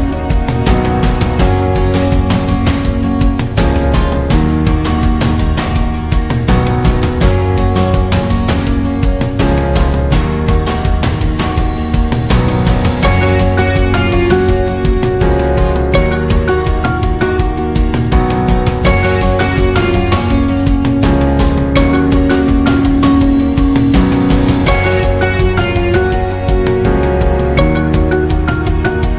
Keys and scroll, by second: 25.2 2, 25.5 0.